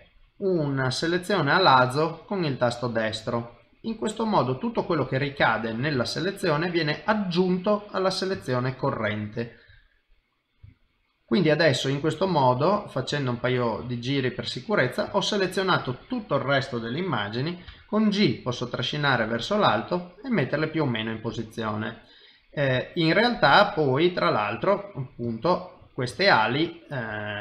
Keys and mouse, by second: 3.9 middle click, 5.4 shift+middle click, 6.0 ctrl+right click, 7.2 middle click, 8.4 ctrl+right click, 9.9 middle click, 10.8 shift+middle click, 11.6 middle click, 12.7 middle click, 13.1 shift+middle click, 13.6 middle click, 15.1 shift+middle click, 15.5 middle click, 17.7 g, 20.1 middle click, 22.8 shift+middle click, 24.9 middle click, 25.4 ctrl+middle click, 26.2 shift+middle click, 26.4 shift+middle click, 26.6 middle click.